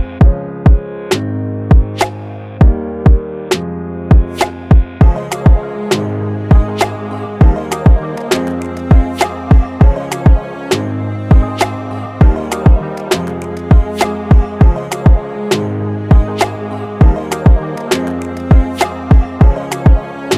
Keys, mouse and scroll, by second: 1.5 alt+click, 5.1-5.6 typing, 7.0-8.5 typing, 12.8 double click, 16.2-17.0 typing, 17.8 double click.